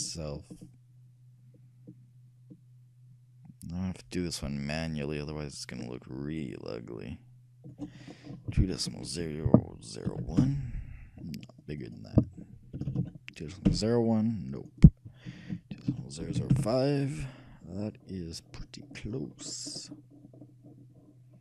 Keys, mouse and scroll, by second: 0.2-1.8 shift+drag, 8.2-10.0 drag, 11.8-13.5 drag, 13.1 BackSpace, 14.7-16.5 drag, 18.6-21.4 middle drag.